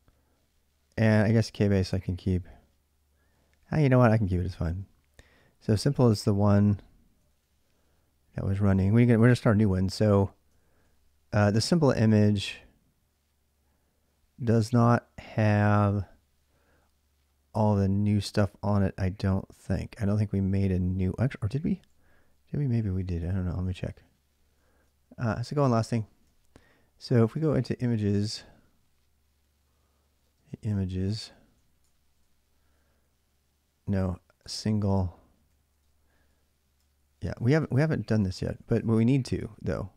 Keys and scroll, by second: 3.5-4.1 BackSpace, 4.3 BackSpace, 4.5 BackSpace, 7.1 ctrl+a, 7.3 ctrl+a, 10.2-11.1 typing, 11.3 ctrl+a, 11.4 ctrl+a, 22.4-23.5 typing, 24.5 ctrl+a, 24.8-28.2 typing, 29.7-32.4 typing, 33.9-39.2 typing.